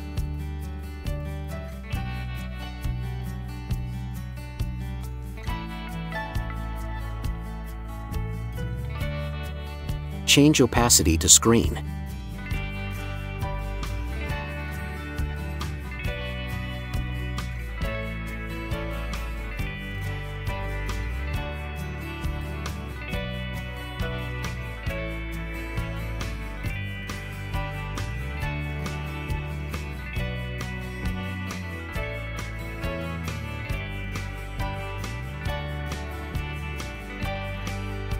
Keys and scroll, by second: 6.2 Return, 22.9 ].